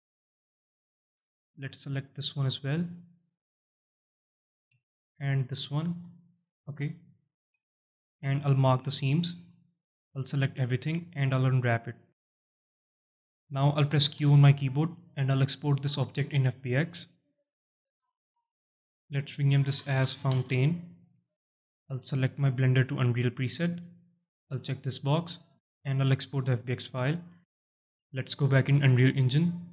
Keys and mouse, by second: 0.4 alt+shift+click, 1.5 shift+click, 2.1-3.7 alt+drag, 4.2 alt+shift+click, 5.2 shift+click, 5.4 shift+click, 6.2 alt+shift+click, 6.7 middle click, 7.2 alt+middle click, 7.6 alt+shift+middle click, 8.1-9.5 drag, 10.2 a, 11.0 u, 12.5 alt+middle click, 12.9 Tab, 14.0 q.